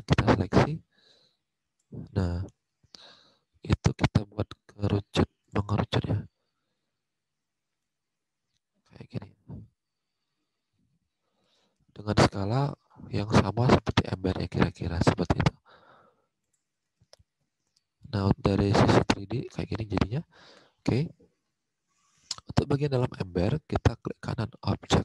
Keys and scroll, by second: 20.0 alt+Tab.